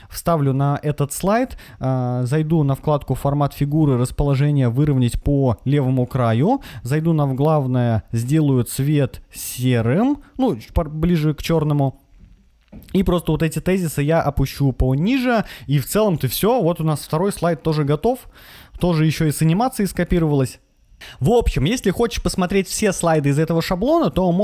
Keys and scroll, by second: 0.3 super+v, 18.7 Left, 19.7 Right.